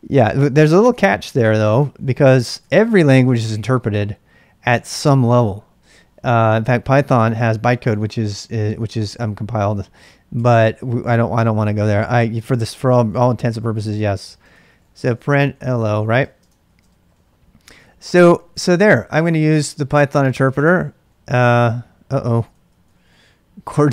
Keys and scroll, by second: 1.3-4.0 typing, 10.4 Return, 11.4 i, 13.1-20.4 typing, 16.6 ctrl+[, 20.6 Return, 22.5 ctrl+c, 22.7-23.6 typing.